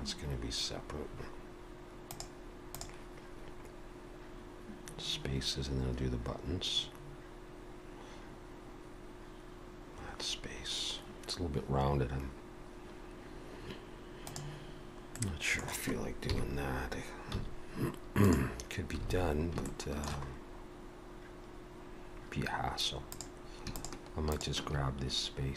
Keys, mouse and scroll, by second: 15.1 middle click, 16.3 KP_3, 17.3 z, 19.1 alt+a, 19.7 shift+middle click, 20.3-22.1 scroll up 1, 22.1-22.7 scroll up 1, 23.1 click, 23.8 shift+click.